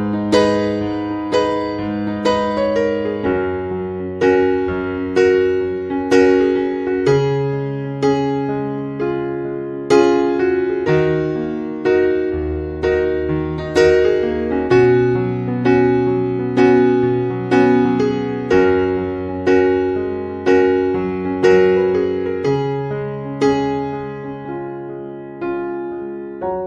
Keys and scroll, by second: 22.6 Escape.